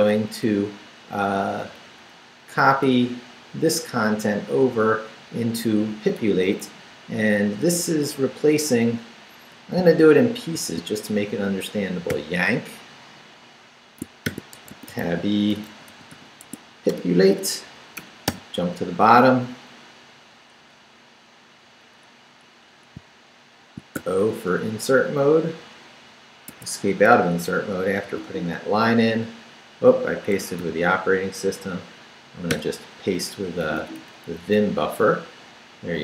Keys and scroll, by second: 1.6 Down, 2.3 Up, 3.7 Left, 6.2 Left, 6.6 Down, 7.3 Down, 8.3 Down, 10.4 shift+v, 10.9 shift+Down, 12.1 y, 14.0-16.6 typing, 16.9 Return, 18.0 shift+Return, 18.3 shift+g, 24.0 shift+o, 24.8 o, 25.6 Return, 26.5 Escape, 27.2 super+Escape, 28.0 super+v, 30.3 Escape, 30.6 u, 32.5 p, 33.4 Down, 34.2 Up.